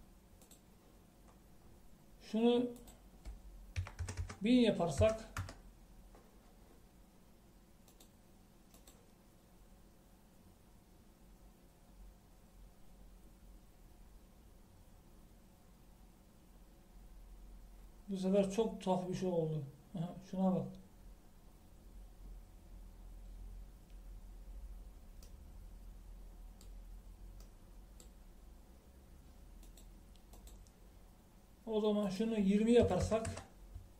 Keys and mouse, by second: 1.7-3.8 drag, 5.3 KP_0, 9.0-11.7 drag, 26.7-28.2 middle drag, 28.8 middle click, 30.9-33.9 drag.